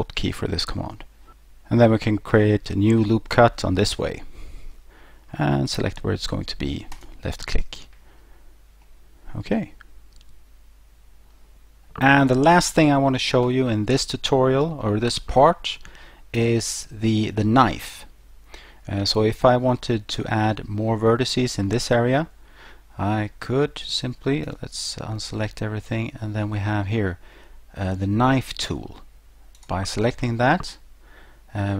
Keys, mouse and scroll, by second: 3.8 click, 6.9 click, 8.8 middle click, 24.5 a, 29.6 click.